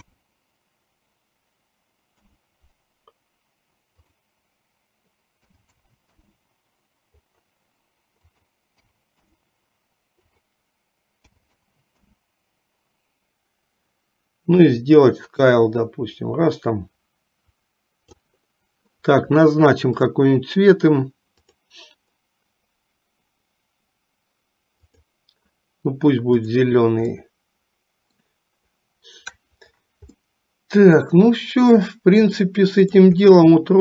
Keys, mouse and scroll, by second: 4.0-6.5 drag, 8.3-9.6 drag, 10.3-12.3 drag, 14.6-18.4 drag, 20.0 click, 21.7-25.2 drag, 26.6 click, 27.3 middle click, 30.4 middle click, 32.6 middle click, 33.4 middle click.